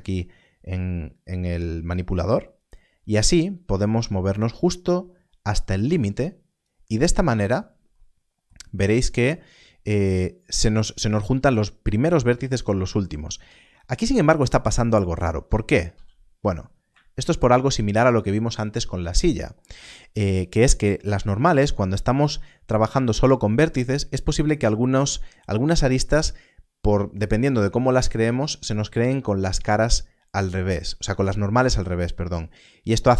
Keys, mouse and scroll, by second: 13.5 Tab, 15.8 a.